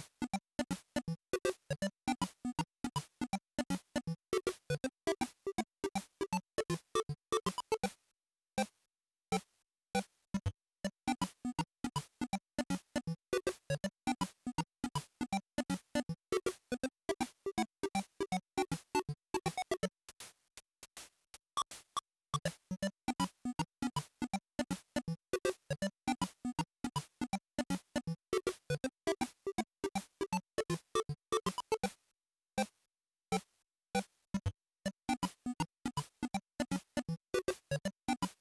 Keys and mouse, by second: 0.7 click, 1.4-3.2 drag, 7.8 Tab, 8.9-14.0 drag, 14.0 Tab, 16.1 click, 16.9 click, 17.9-19.1 drag, 19.1 o, 26.2 ctrl+shift+click, 27.3-30.4 drag, 30.4 ctrl+t.